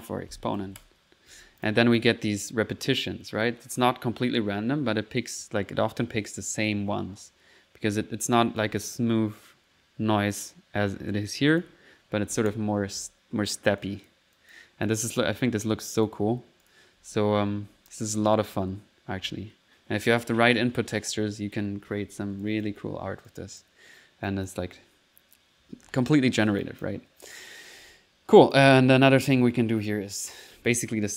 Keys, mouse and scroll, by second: 1.6 click, 2.0-2.7 typing, 6.4 click, 8.4 click, 11.5 click, 13.3 middle click, 13.8 click, 15.0 middle click, 15.6 click, 16.5 click, 16.5-19.1 typing, 20.3-21.3 typing, 22.4 click, 22.8 typing, 23.3 click, 24.2 click, 25.6-26.3 typing, 26.6 click, 28.4 click, 29.0-31.1 typing, 29.1 right click, 29.8 click.